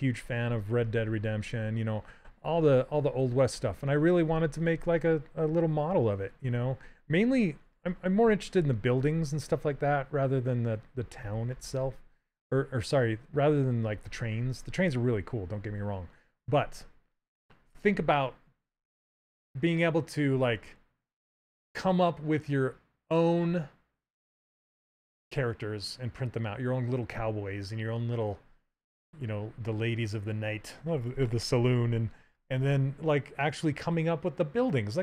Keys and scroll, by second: 0.4 s, 7.3 s, 9.4 s.